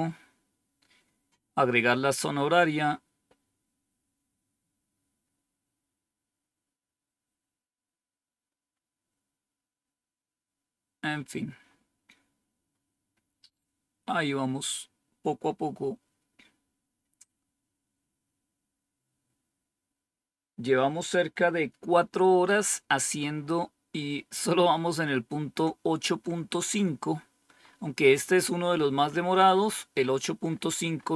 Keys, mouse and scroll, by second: 0.3-1.7 scroll down 1, 1.7-2.2 scroll down 1, 2.2-3.5 scroll down 1, 3.5-4.2 scroll down 1, 4.2-5.2 scroll down 1, 5.2-5.7 scroll up 2, 5.7 scroll down 2, 7.2-8.6 scroll down 2, 8.6-9.3 scroll up 2, 11.5-13.3 scroll up 3, 13.3-14.0 scroll up 1, 14.0-14.8 scroll up 1, 14.8-16.8 scroll up 2, 17.2 scroll up 2, 26.9-31.1 scroll up 12.